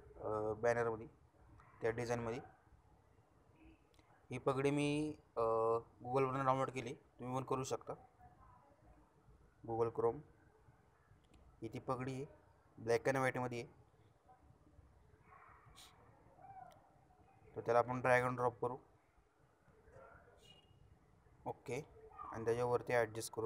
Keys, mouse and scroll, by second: 1.1-3.2 shift+scroll down 1, 3.5 shift+p, 4.3 shift+a, 5.7 shift+g, 6.2 shift+d, 6.8 shift+i, 7.7 shift+Return, 9.9 shift+click, 10.1 shift+click, 17.8-21.8 shift+drag.